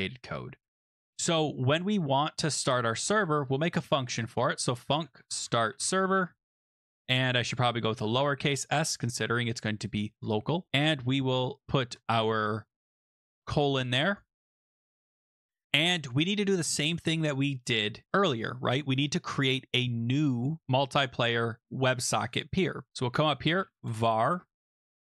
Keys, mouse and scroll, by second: 0.8 click, 2.8 click, 3.4 Return, 3.5-12.3 typing, 7.9 Left, 10.2 click, 13.9 click, 14.1 click, 15.2 click, 20.6 click, 22.9 click, 23.1-25.2 typing.